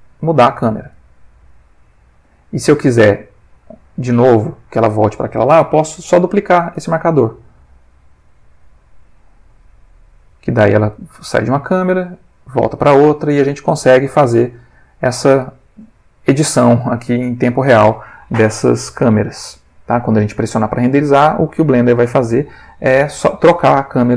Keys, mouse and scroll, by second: 3.3 click, 6.8 shift+d, 8.8 click, 9.5-18.0 drag, 19.0 middle click, 20.0 ctrl+middle click.